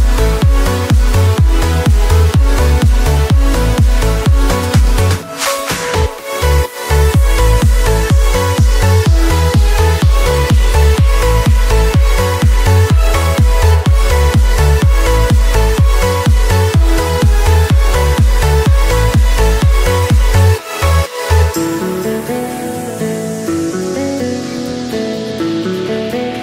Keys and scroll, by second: 15.0 p, 18.6 F9.